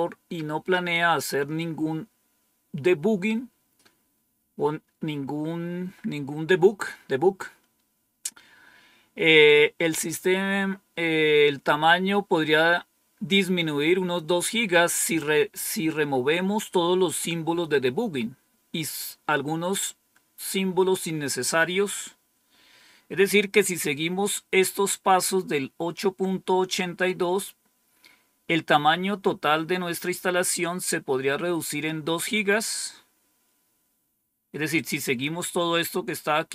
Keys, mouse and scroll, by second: 31.5 click, 32.9-33.6 scroll down 3, 33.8-34.7 scroll down 2, 34.7-35.6 scroll down 1, 35.8-36.5 scroll down 4.